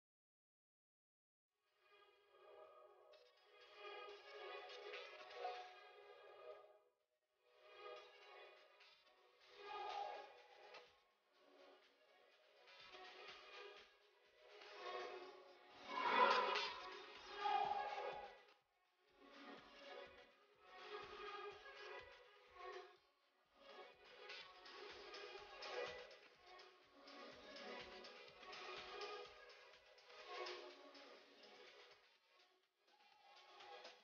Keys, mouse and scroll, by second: 4.4 click, 6.9 click, 11.6 click, 15.2 scroll up 1, 15.8 click, 21.0 click, 25.5 click, 30.3-31.0 scroll up 1, 31.0 click, 32.0 click.